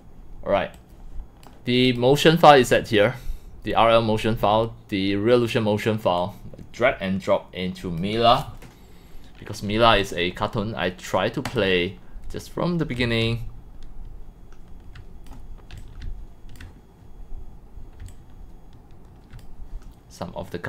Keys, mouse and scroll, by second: 0.3 click, 2.0 click, 2.3 click, 6.2-7.4 drag, 8.0 click, 11.6 drag, 12.1-12.4 scroll, 12.7-16.6 typing, 14.6-15.3 drag, 15.8 click, 16.7-18.0 drag, 18.0-19.4 c, 19.4 click.